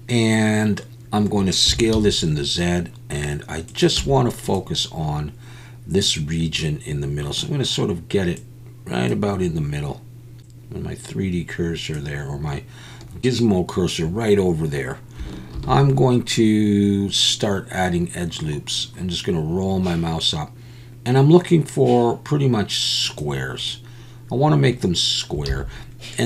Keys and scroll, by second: 1.7 s, 1.9 z, 4.0 z, 15.5 ctrl+r, 25.5 alt+a.